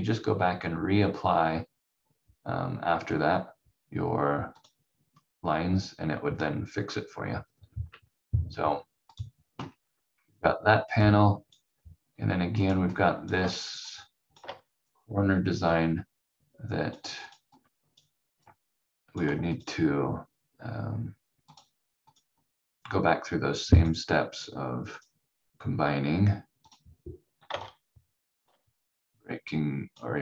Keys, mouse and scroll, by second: 4.6 click, 7.5 scroll up 1, 7.8 v, 8.4 v, 9.1 click, 9.7-11.0 scroll down 1, 11.0 click, 27.6 shift+click.